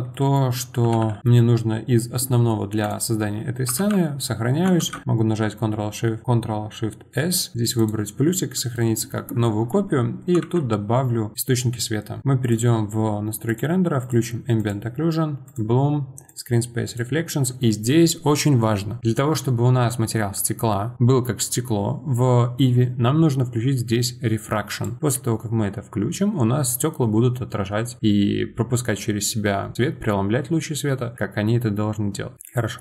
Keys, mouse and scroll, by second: 0.8 r, 1.2-2.8 middle drag, 2.8 click, 3.8 ctrl+s, 4.8 ctrl+shift+s, 4.8 ctrl+shift+s, 8.7-10.4 middle drag, 10.4 shift+a, 14.0 click, 15.5 click, 16.3 click, 24.7-32.8 drag.